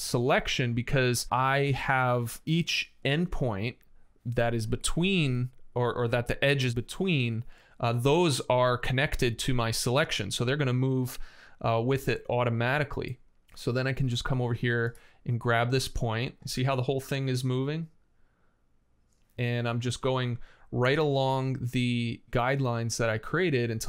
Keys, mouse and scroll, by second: 7.6 space, 11.7 m, 11.7 space.